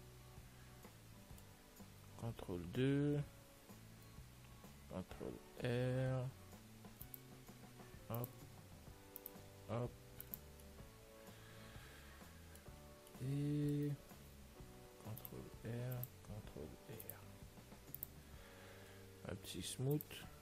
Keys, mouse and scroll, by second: 2.8 ctrl+2, 3.2-6.3 middle drag, 4.0 Tab, 5.1 ctrl+r, 9.2 ctrl+r, 10.9-12.8 middle drag, 13.6-18.5 middle drag, 15.1 ctrl+r, 18.5 Tab, 19.5-20.4 middle drag, 20.2 click.